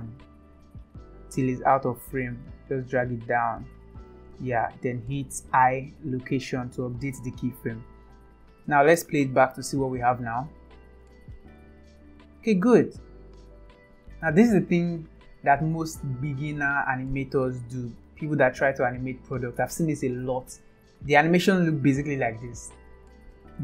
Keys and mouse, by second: 0.3-1.1 drag, 2.4-4.3 drag, 5.4 i, 8.1-9.4 drag, 10.8 space, 13.0 click, 14.3 space, 21.4 click, 22.0 space, 23.0 space.